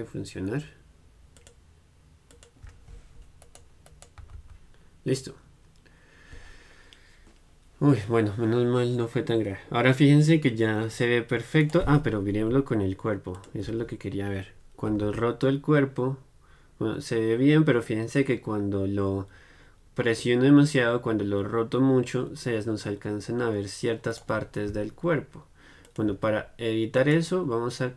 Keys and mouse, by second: 1.5-11.8 drag, 3.6-15.4 right drag, 13.5-15.4 drag, 24.4-27.9 right drag, 26.0-27.8 drag.